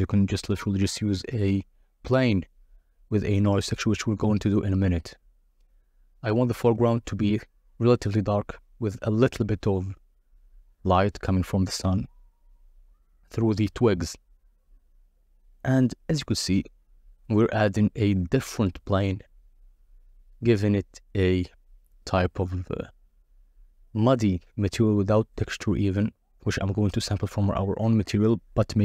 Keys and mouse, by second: 1.6 KP_0, 3.2 click, 3.8 click, 4.3 alt+d, 4.6 y, 5.8 g, 5.9 z, 8.4 click, 9.6 click, 10.8 shift+a, 11.9 g, 12.1 y, 12.4 z, 13.6 x, 14.8-16.9 typing, 16.2 Return, 17.7 Return, 18.3 g, 18.5 x, 19.8 g, 19.9 z, 20.5 -, 20.6 Return, 20.6 3, 22.2 click, 23.2 n, 23.5 click, 23.8 click, 27.1 click, 27.6 click, 28.7 n.